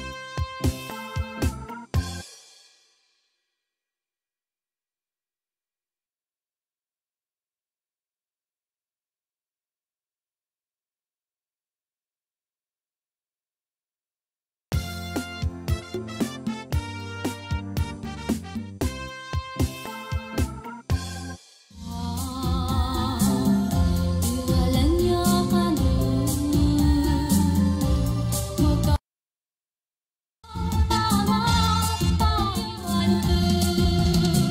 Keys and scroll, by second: 2.1 space, 14.5 space, 21.3 space, 30.4 space, 32.4 ctrl+shift+Left.